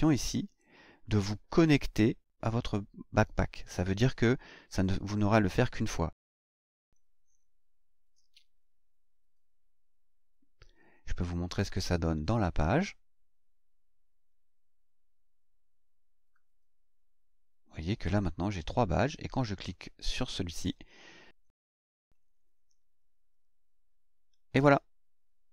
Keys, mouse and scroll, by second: 6.6 click, 11.5 click, 12.1 click, 12.5-17.3 scroll up 1, 17.3-17.6 scroll down 2, 19.7 click, 21.9 click.